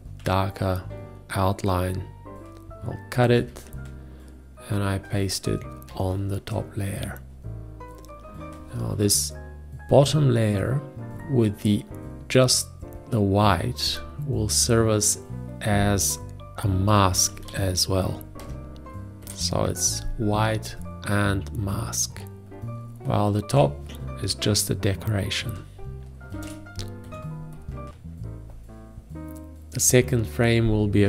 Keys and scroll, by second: 3.8 ctrl+x, 6.4 ctrl+shift+v, 11.1 F5, 17.3-18.8 typing, 19.6 Return, 26.8 ctrl+shift+g, 27.5 Escape.